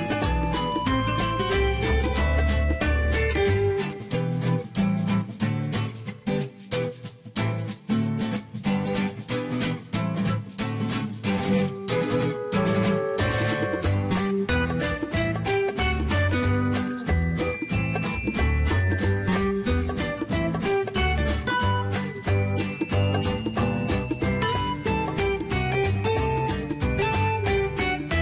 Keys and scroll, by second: 6.0 ctrl+z, 9.5 0, 10.0 Return.